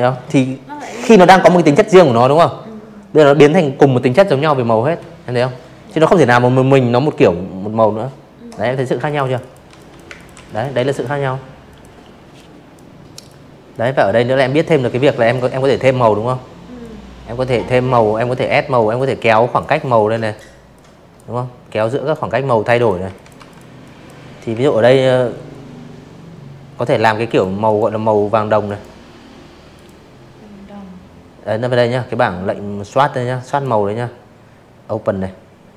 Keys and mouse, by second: 6.0 click, 6.1 click, 6.3 click, 6.6 z, 6.7 click, 7.0 space, 7.1 click, 7.2 z, 7.3 click, 7.6 v, 7.8 click, 8.6 click, 9.2 click, 10.1 click, 10.6 click, 11.4 click, 13.7-14.6 alt+drag, 15.8 click, 16.8 click, 17.6 click, 18.7 click, 19.3-20.7 typing, 19.7 click, 20.0 click, 20.4 click, 20.7 click, 21.4 Delete, 21.7 click, 24.1 click, 24.6 click, 25.5 click, 26.6 click, 30.3 click.